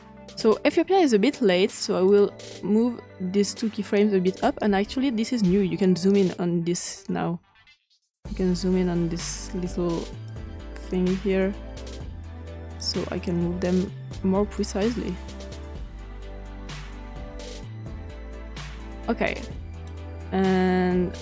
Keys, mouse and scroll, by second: 0.0 click, 2.0 click, 5.9 scroll up 2, 6.7-8.6 scroll down 6, 8.8-9.4 ctrl+scroll down 1, 10.2-13.5 drag, 14.5-15.8 drag, 17.1 click, 19.3 click.